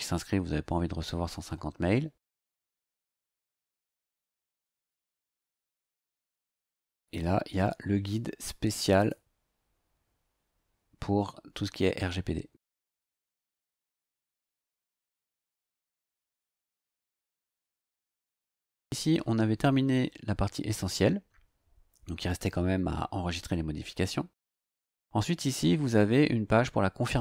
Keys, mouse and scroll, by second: 2.4 scroll down 2, 9.0 click, 13.8 click, 16.5 click, 24.5 click.